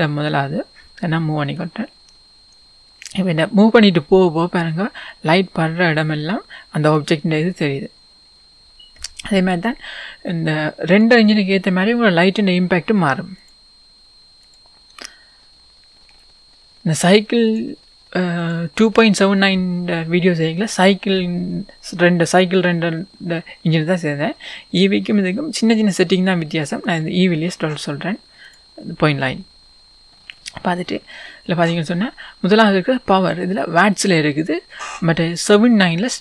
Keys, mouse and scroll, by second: 1.7 click, 7.5 scroll down 1, 14.7-30.1 drag, 15.9-16.3 scroll up 1, 20.4-21.2 scroll down 1, 30.4-30.7 scroll up 1.